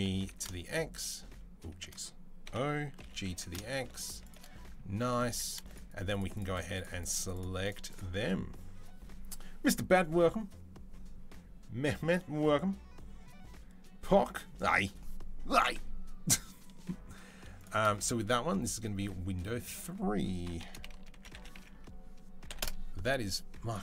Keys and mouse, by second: 2.2 o, 2.8 g, 3.4 shift+click, 4.2-5.4 middle drag, 5.0 3, 5.4-7.5 shift+drag, 7.5 middle click, 7.6 click, 7.7-17.4 middle drag, 17.4 shift+click, 17.4 shift+middle click, 18.4-19.4 drag, 19.4 middle click, 19.6-23.8 drag.